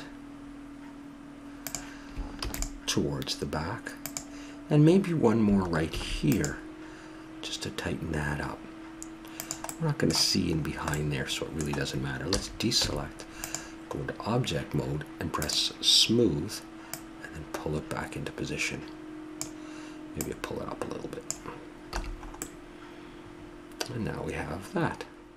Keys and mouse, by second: 2.2 ctrl+r, 6.1 ctrl+r, 9.5 middle click, 12.2 a, 12.6 Tab, 13.8-15.2 middle drag, 15.2-18.5 drag, 20.0-21.8 drag, 21.8 a.